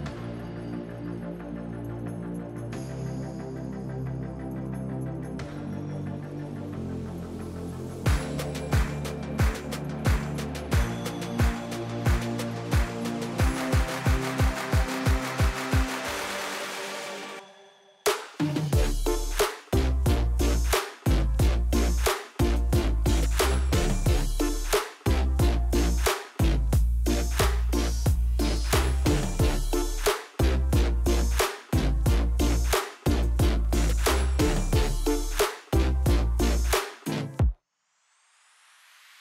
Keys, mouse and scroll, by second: 0.2 s, 1.4 click, 1.6-3.0 middle drag, 3.4 click, 5.0 click, 5.5 click, 5.8 click, 7.0 scroll down 1, 7.4-8.4 shift+middle drag, 8.4 shift+a, 10.8 g, 12.0 click, 12.4 s, 13.7 click, 14.3 click, 14.7 click, 14.9 click, 15.8 KP_0, 16.1 KP_Enter, 16.7 click, 17.4-17.8 middle drag, 17.8-18.1 scroll up 1, 18.1-19.6 shift+middle drag, 19.9-20.2 scroll down 1, 21.3 s, 21.9 click, 23.6 click, 24.0 middle click, 24.5 KP_7, 25.8 shift+d, 28.4 click, 29.6 g, 31.6 click, 32.1 KP_1, 34.3 r, 35.9 Escape, 35.9 KP_3, 38.6 click.